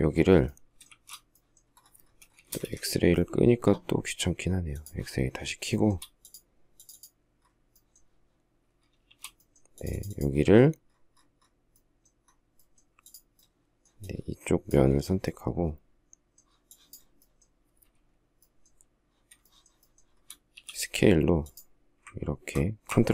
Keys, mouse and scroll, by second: 0.7 shift+z, 2.3 space, 2.5 Escape, 5.7 shift+middle click, 8.8 shift+s, 19.2 shift+middle click, 19.6 shift+middle click, 20.0-20.3 shift+scroll, 20.3 s.